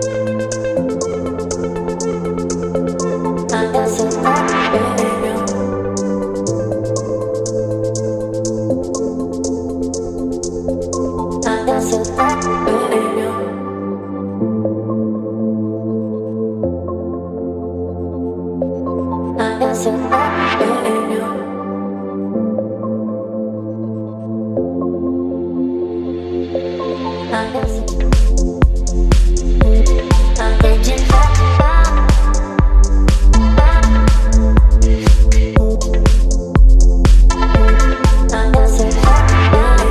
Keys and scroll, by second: 0.0 v, 0.9 Up, 1.5 Up, 2.9 space, 4.4 Up, 5.2 Up, 5.3 Up, 5.8 ctrl+t, 6.8 Up, 6.8 Up, 6.9 Up, 7.2 Return, 8.4 space, 11.0 ctrl+a, 11.1 ctrl+s, 11.1-12.9 typing, 17.6 KP_0, 17.7 Return, 23.9 v, 32.2 space, 39.4 ctrl+t.